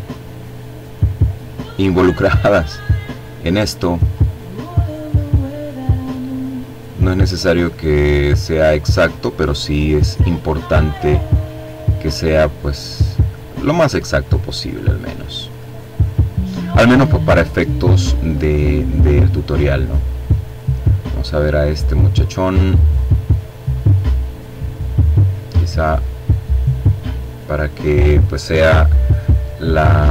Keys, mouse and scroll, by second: 0.3-2.0 drag, 2.6-5.0 drag, 5.1-8.1 drag, 8.3-10.6 drag, 10.8 click, 14.7-15.3 scroll down 2, 16.6 click, 19.0 click, 21.4-26.5 drag, 28.6-29.2 scroll down 2, 29.2-30.1 scroll up 2.